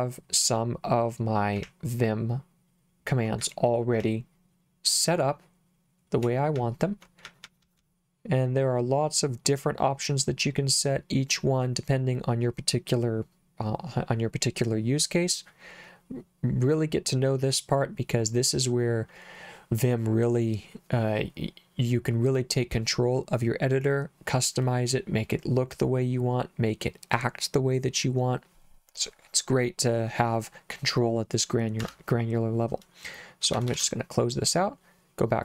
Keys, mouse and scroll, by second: 1.7 k, 3.4 j, 4.0 k, 6.6-7.8 typing, 31.8 Escape, 33.5 shift+z, 33.7 shift+z.